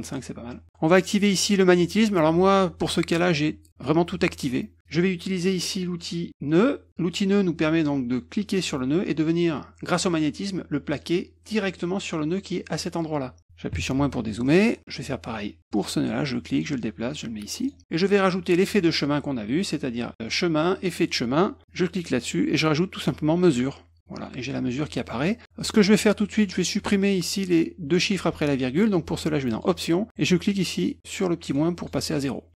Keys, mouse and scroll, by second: 0.0 click, 1.1 click, 6.4 click, 8.4-10.9 drag, 11.5 middle click, 11.6 middle click, 14.4 middle click, 15.7-17.6 drag, 18.5 click, 20.7 click, 21.6 click, 23.4 click, 29.5 click, 31.4 click, 31.7 click.